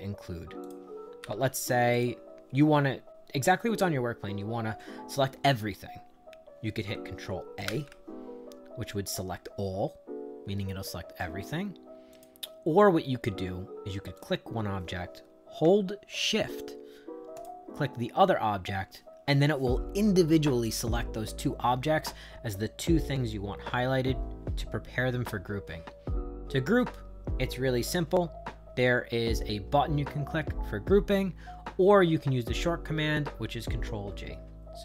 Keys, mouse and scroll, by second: 0.6 click, 1.9 click, 7.7 ctrl+a, 12.1 click, 14.2 click, 17.3 shift+click.